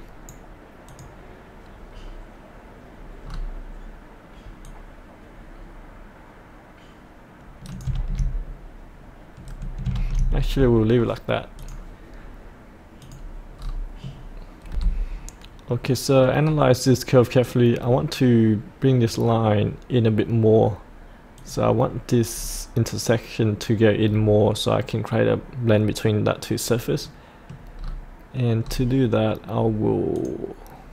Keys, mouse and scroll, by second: 0.8 click, 3.3-4.6 scroll down 1, 4.6 click, 5.6-7.9 drag, 7.9 ctrl+z, 11.6 click, 13.6-14.6 scroll up 1, 14.7 F8, 15.1-15.7 scroll up 1, 15.7 middle click, 16.5-16.9 scroll down 1, 16.9-18.3 middle drag, 21.4 click, 22.3-23.2 scroll up 1, 27.1 middle click, 27.8-28.6 scroll down 1, 30.1 click.